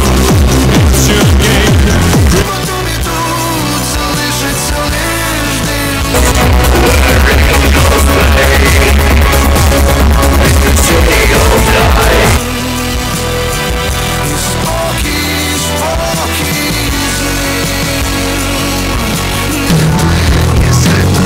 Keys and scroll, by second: 2.9 Page_Down, 12.4 Page_Down.